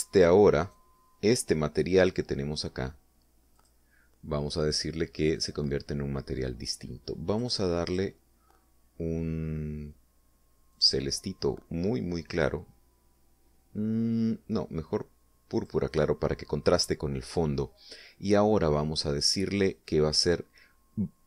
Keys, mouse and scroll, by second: 1.1 right click, 4.0 click, 5.8 click, 7.8 click, 8.3 click, 11.2 click, 16.0 click.